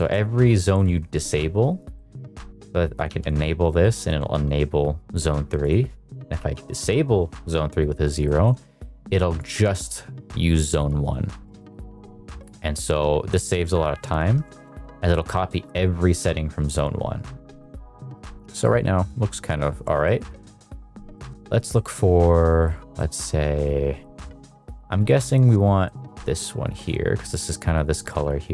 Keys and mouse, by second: 0.1 middle click, 0.6 middle click, 2.0 middle click, 2.9 click, 5.6-6.7 drag, 8.1 shift+middle click, 8.8 middle click, 12.4 middle click, 14.4-14.8 shift+middle drag, 15.5 middle click, 16.5 middle click, 17.5 shift+middle click, 18.5 shift+middle click, 20.0 middle click, 21.1 middle click, 21.6 middle click, 22.9-23.9 middle drag, 24.6 middle click, 25.1 middle click, 25.9 middle click, 26.7 click.